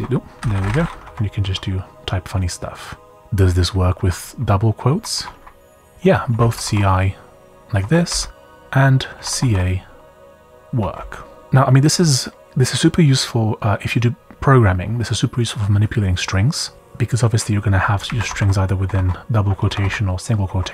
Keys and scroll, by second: 0.0-1.9 typing, 2.9-12.6 typing, 7.8 Escape, 17.4-19.8 typing, 20.4 Escape.